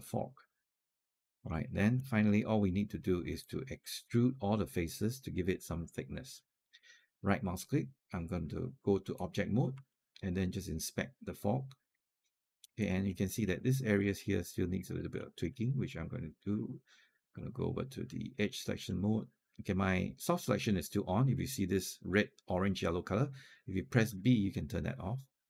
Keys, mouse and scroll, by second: 1.4 scroll up 1, 1.8 alt+click, 3.2 alt+click, 5.6 alt+click, 6.2 alt+click, 7.0-9.6 right drag, 9.7-12.4 alt+drag, 12.7 alt+middle click, 13.1 scroll up 1, 13.4 click, 14.3 alt+click, 14.8 alt+middle click, 15.1 alt+click, 15.5-20.1 right drag, 23.9 b.